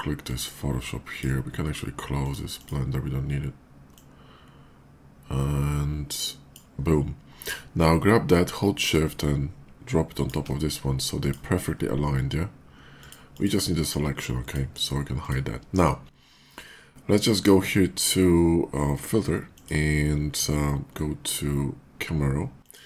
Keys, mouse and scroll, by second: 0.0-1.0 drag, 8.0-10.1 drag, 11.0 shift+click, 12.8 shift+click, 13.2 click, 14.1 click, 15.0 click, 19.2 click, 22.4 click.